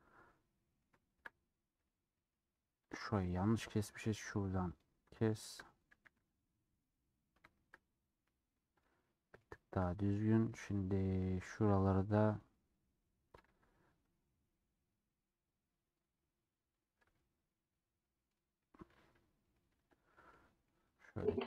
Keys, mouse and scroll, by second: 0.2 middle click, 0.3 scroll down 2, 0.5-3.0 middle drag, 3.0 click, 3.4 scroll up 1, 3.5 middle click, 4.3 click, 5.4 shift+click, 6.0 a, 6.9-8.2 middle drag, 8.2 scroll down 2, 8.9 click, 9.0 middle click, 9.9-10.2 scroll up 4, 10.2 scroll down 1, 10.3 scroll up 1, 10.4-13.5 middle drag, 13.5 a, 17.1 Tab, 17.6 middle click, 18.3-18.6 scroll down 2, 18.6 middle click, 19.1 Tab, 19.2 middle click, 19.7 2, 20.1 middle click, 20.8 scroll up 1, 20.9 scroll down 1.